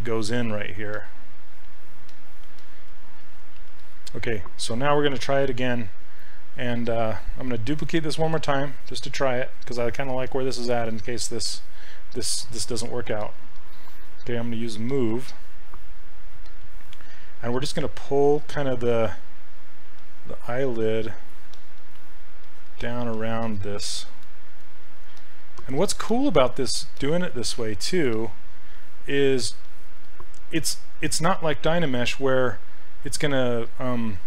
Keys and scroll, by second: 3.2 s, 13.2 s, 31.3 s.